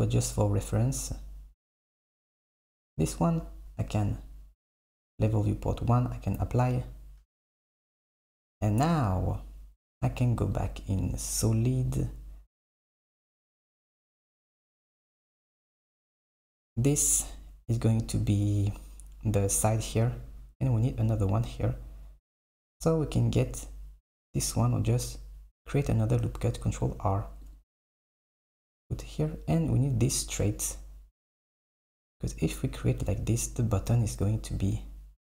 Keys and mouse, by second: 0.1 super+middle click, 2.4 click, 6.0-7.5 drag, 7.5 Tab, 8.0 KP_1, 10.6 click, 13.8 click, 16.4 click, 22.4 click, 26.7 ctrl+r.